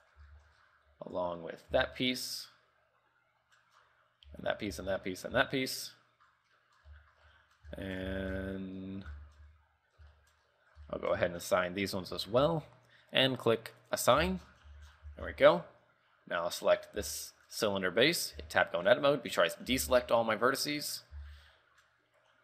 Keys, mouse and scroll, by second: 0.0 middle click, 0.4 shift+middle click, 0.7 scroll up 3, 0.9 z, 1.9 l, 2.2 middle click, 3.9 scroll down 3, 4.4 l, 4.8 l, 5.5 l, 5.9 middle click, 6.7 middle click, 7.1 shift+middle click, 7.2 shift+middle click, 7.4 middle click, 7.9 shift+middle click, 8.2 z, 8.5 shift+middle click, 8.9 middle click, 9.3 shift+middle click, 9.7 KP_3, 10.3 shift+middle click, 10.6-10.9 scroll up 5, 11.0 shift+middle click, 12.3 l, 12.5 l, 14.0 click, 14.5 Tab, 14.7-15.2 scroll down 7, 14.8 z, 15.2 z, 15.5 shift+middle click, 15.8-16.2 scroll up 3, 17.1 right click, 17.3 shift+middle click, 17.8 scroll up 3, 18.5 Tab, 18.7 shift+middle click, 19.5-19.8 scroll down 3, 19.8 a, 20.1-20.5 scroll up 6, 20.6 middle click, 21.3 z, 21.5 middle click.